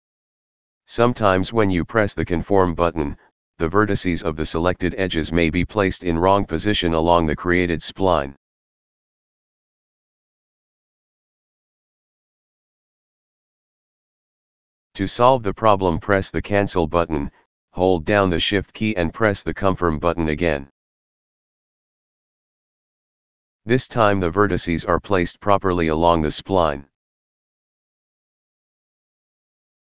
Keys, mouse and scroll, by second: 0.2 click, 0.7 click, 1.9 click, 2.8 click, 3.5 click, 3.6 click, 6.0 click, 10.4 right click, 17.1 click, 21.1 shift+click, 23.6 click, 24.5-28.6 drag.